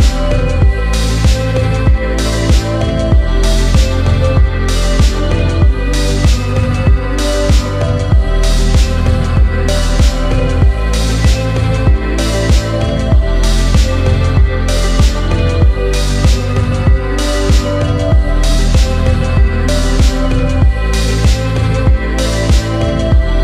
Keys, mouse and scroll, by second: 2.2 r, 3.2 z, 5.2 click, 6.0-10.5 drag, 11.4 click, 12.3-12.8 scroll down 1, 12.9-22.1 middle drag, 22.2-22.5 scroll down 2, 22.5-23.4 middle drag.